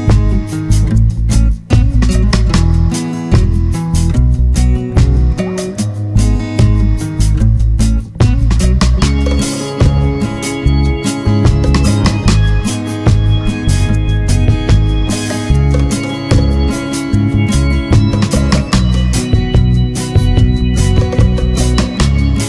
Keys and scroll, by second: 7.7 ctrl+=, 7.9 ctrl+space, 11.1 ctrl+0.